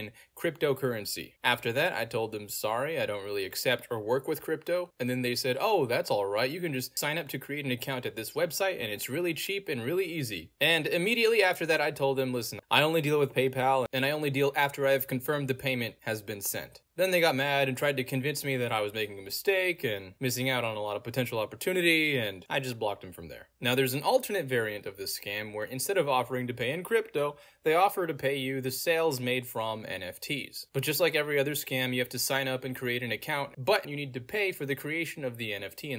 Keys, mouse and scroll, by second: 2.9 click, 4.2 middle click, 4.2-5.2 scroll down 2, 5.6 click, 7.4-8.7 middle drag, 7.5-8.3 scroll down 2, 8.3-8.7 scroll down 1, 9.3 click, 11.1 middle click, 11.1-11.6 scroll down 2, 12.0 click, 13.8 click, 13.9 click, 14.0 Return, 17.9-22.6 middle drag, 17.9-19.3 scroll down 2, 19.3-21.8 scroll down 1, 21.8-22.4 scroll down 1, 22.4 scroll down 1, 23.2 Return, 25.6 middle click, 25.6-28.5 scroll down 2, 28.5 Return, 29.5 click, 30.7 Return, 31.5 click, 33.2 click, 35.3 click.